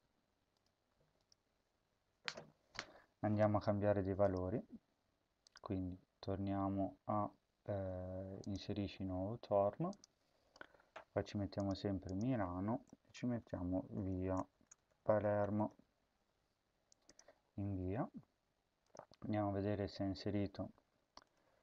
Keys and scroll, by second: 0.7 Return, 1.7 ctrl+s, 12.7-16.0 typing.